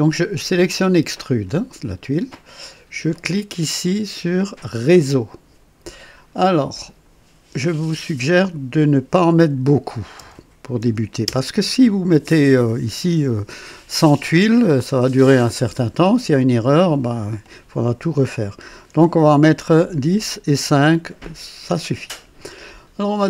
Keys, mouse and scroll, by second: 0.1 click, 3.8 click, 4.7 click, 6.6 click, 10.1 KP_1, 11.2 KP_0, 16.2 click, 19.1 KP_5.